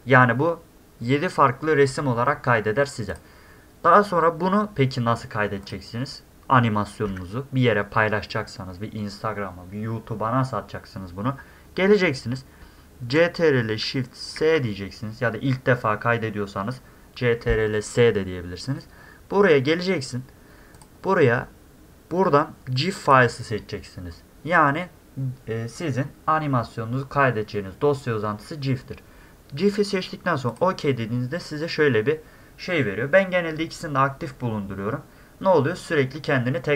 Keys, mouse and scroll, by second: 3.1 click, 5.6 click, 14.4 ctrl+shift+s, 20.7 click, 23.0 click, 30.5 click.